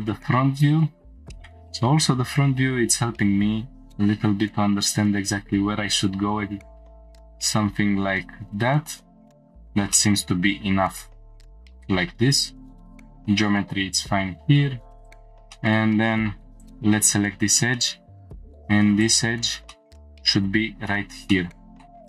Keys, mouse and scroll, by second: 0.2 scroll down 1, 1.0-1.5 scroll down 3, 1.3 shift+middle click, 1.3-3.1 scroll up 2, 3.7 g, 3.9 z, 7.0 click, 7.3 scroll up 2, 8.3 scroll down 1, 9.3 click, 9.3 scroll down 1, 9.9-11.0 shift+middle drag, 12.8 click, 12.8 shift+middle click, 15.0 click, 15.5 shift+middle click, 16.5 2, 16.6 click, 17.7 middle click, 19.0 click, 19.7 shift+middle click, 21.3 click, 21.3 middle click, 21.9 shift+middle click, 21.9 scroll down 1.